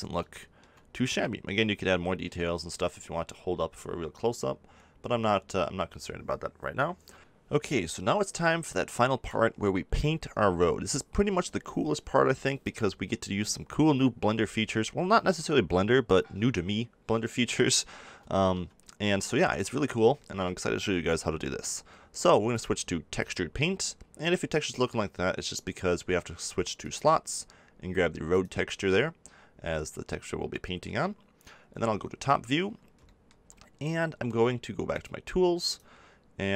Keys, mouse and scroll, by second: 23.5-30.0 drag, 30.0 middle click, 30.6-31.7 drag, 31.7 KP_7, 35.2-36.5 drag.